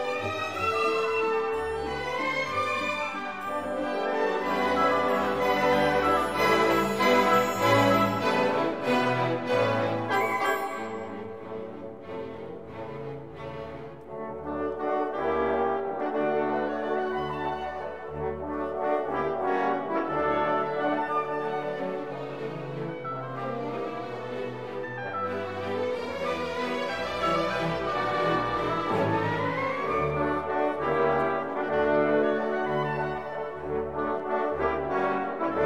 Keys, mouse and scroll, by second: 0.4 click, 1.2 BackSpace, 4.1 shift+8, 5.3 x, 5.7 0, 8.4 Return, 8.9 click, 9.6 click, 11.6-13.5 drag, 13.5 middle click, 14.0 click, 16.2 click, 17.2-17.6 scroll up 2, 18.9 click, 23.0 scroll down 2, 24.7 scroll down 2, 26.8-28.9 drag, 29.4 scroll down 2, 31.2 click, 31.5 click, 32.6 BackSpace, 32.8 1, 33.7 click, 35.4 click.